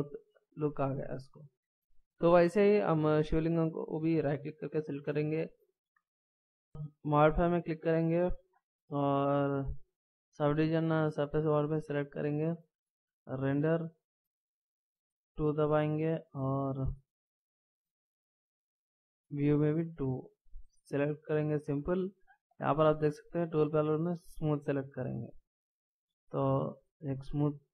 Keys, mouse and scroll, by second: 3.2-3.9 scroll up 1, 3.9 right click.